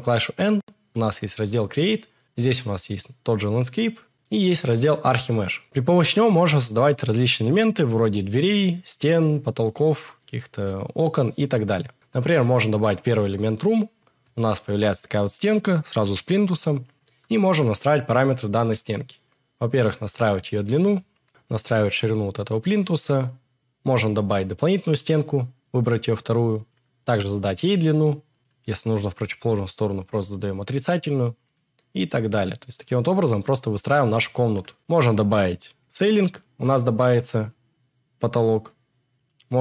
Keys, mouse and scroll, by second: 24.4 middle click, 26.6-28.4 middle drag.